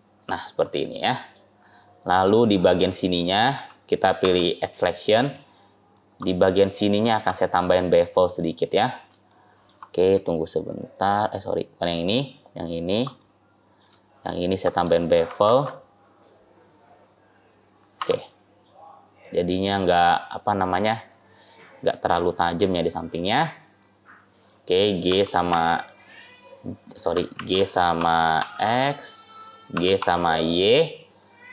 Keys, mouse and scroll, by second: 0.3-0.7 scroll up 2, 0.7 middle click, 1.5 click, 2.5 click, 4.1 2, 4.7 click, 5.8 shift+click, 6.3 middle click, 7.4-8.3 scroll down 5, 8.1 middle click, 8.8-9.3 scroll up 2, 9.3 shift+middle click, 10.5 shift+click, 13.1 middle click, 14.3 shift+click, 15.3 ctrl+b, 17.8 Tab, 18.2 middle click, 19.1 click, 19.6 middle click, 20.6 middle click, 23.6 click, 25.0 g, 27.2 ctrl+z, 27.8 g, 29.6 g, 31.2-31.5 scroll down 4.